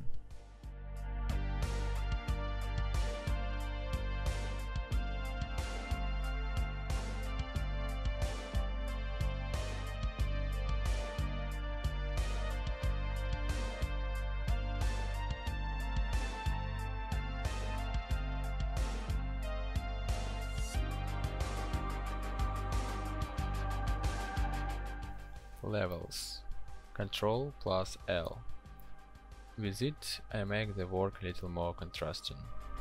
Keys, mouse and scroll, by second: 25.4 ctrl+l.